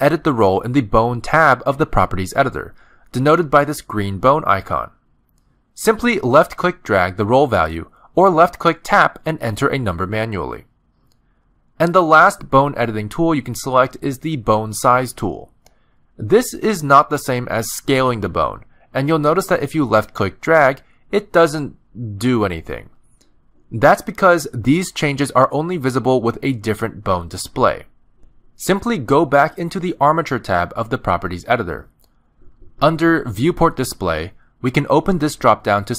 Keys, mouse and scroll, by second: 1.6 click, 3.6 click, 7.7 click, 9.8 click, 15.9 click, 17.1 middle click, 18.0 click, 24.9 ctrl+z, 25.4 middle click, 25.9 shift+middle click, 30.0 click, 34.8 click.